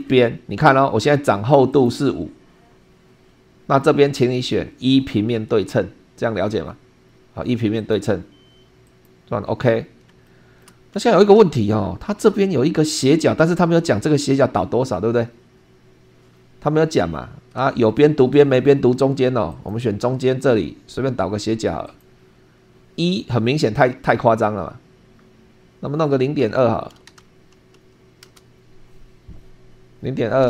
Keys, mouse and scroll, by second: 1.7 click, 2.5 5, 7.8 click, 8.8 click, 9.7-10.0 scroll up 2, 10.2-10.8 shift+middle drag, 17.6 super+2, 19.5 click, 21.8 click, 27.0 ., 27.6 2.